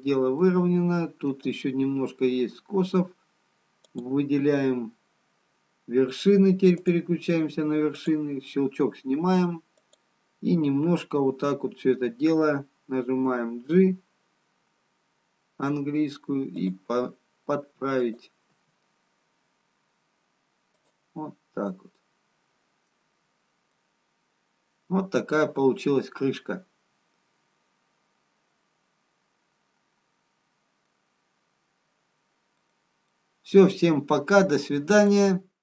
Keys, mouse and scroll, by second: 1.2 middle click, 1.2-1.7 scroll down 1, 3.8 click, 8.0 click, 13.6 g, 18.5 click, 18.5 g, 22.5 middle click, 24.0 middle click, 24.0-25.0 scroll down 2, 25.6-26.1 scroll up 1, 32.6 middle click, 32.6-33.5 scroll down 1.